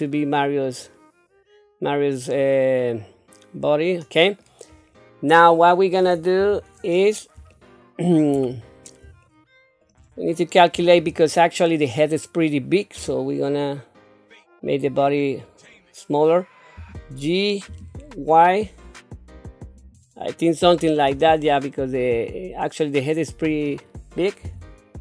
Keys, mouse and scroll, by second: 4.7-5.2 scroll down 1, 5.2-6.4 scroll down 2, 6.4 KP_7, 7.5 shift+middle click, 8.5-8.9 scroll up 3, 9.2 shift+middle click, 10.1 scroll down 1, 13.0 s, 16.7 g, 20.4 scroll down 1, 20.9-23.1 middle drag, 23.4 scroll up 2, 24.4 KP_3.